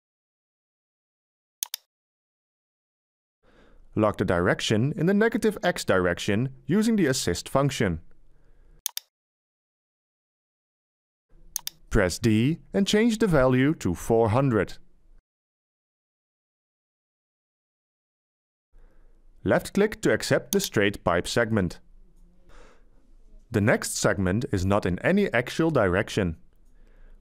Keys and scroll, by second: 14.1 d, 15.6 4, 16.1 0, 16.8 0, 17.5 Return.